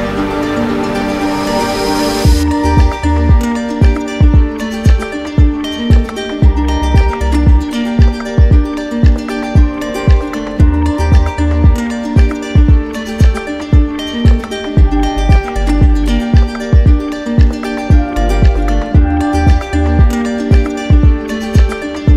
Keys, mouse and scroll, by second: 1.8 click, 2.1 alt+click, 4.7 alt+click, 5.4 right click, 5.8 z, 6.7 click, 7.7 right click, 9.0 click, 9.3 ctrl+z, 11.2 ctrl+d, 13.3-14.8 drag, 13.9 ctrl+z, 16.2 right click, 17.9 ctrl+d, 19.6 alt+click.